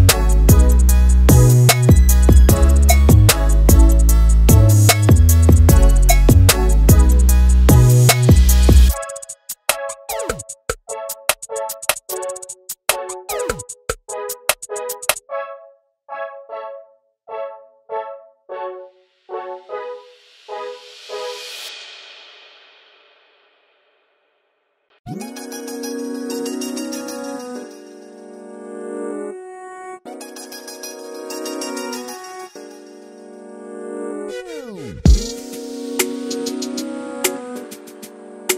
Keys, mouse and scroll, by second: 1.1 e, 1.6 e, 2.7 scroll up 2, 2.9 click, 3.2 scroll down 1, 3.5 ctrl+z, 3.5 scroll up 1, 3.6 middle click, 4.4 KP_1, 4.6 scroll up 2, 4.8 e, 6.3 scroll down 3, 6.5 scroll up 3, 6.7 shift+middle click, 7.1 scroll down 1, 7.3 i, 9.0 x, 9.5 scroll down 1, 9.6 shift+middle click, 9.7 scroll up 1, 9.7 middle click, 10.1 ctrl+r, 11.3 scroll down 1, 11.4 scroll up 1, 11.5 middle click, 11.9 Tab, 12.0 alt+a, 12.2 click, 12.3-12.9 scroll up 2, 12.5 Tab, 12.9 3, 13.1 click, 13.4 KP_1, 13.5 alt+z, 13.6-14.1 scroll up 3, 13.7 shift+middle click, 13.8 click, 14.1 shift+click, 14.9 shift+click, 15.7 click, 15.9 shift+click, 16.6 shift+click, 17.6-18.3 ctrl+z, 18.9 ctrl+z, 19.1 ctrl+z, 19.2 ctrl+z, 19.3 ctrl+z, 19.8 ctrl+r, 22.0 3, 22.2 click, 22.9 shift+click, 23.9 alt+z, 24.0 middle click, 24.2 scroll down 3, 24.2 shift+middle click, 24.5 scroll up 1, 24.6 shift+middle click, 25.1 alt+e, 28.3 scroll down 1, 28.4 scroll up 1, 28.5 Tab, 28.7 alt+a, 28.8-29.2 middle drag, 29.2 scroll down 1, 29.3 shift+middle click, 29.5 scroll up 4, 29.7-30.3 middle drag, 30.3 scroll down 3, 30.3-30.9 middle drag, 30.9 click, 31.1 KP_1, 31.3-32.2 scroll up 2, 32.4 scroll down 6, 32.7 scroll up 2, 32.8 scroll down 1, 33.1 drag, 33.2 shift+middle click, 33.4 Tab, 33.9 ctrl+r, 34.5 click, 35.7 shift+middle click, 36.1-37.3 drag, 37.8 click.